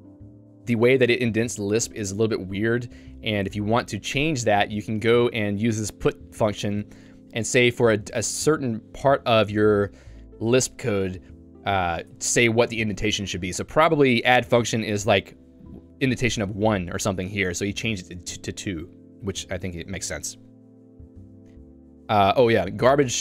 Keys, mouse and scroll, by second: 0.0-6.5 typing, 7.6-9.1 typing, 12.1 Escape, 12.4-19.0 typing, 22.4 k.